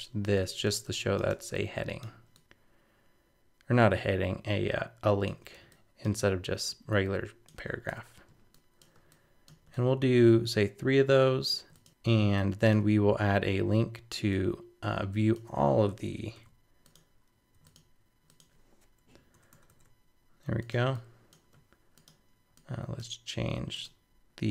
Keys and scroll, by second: 19.3 super+-.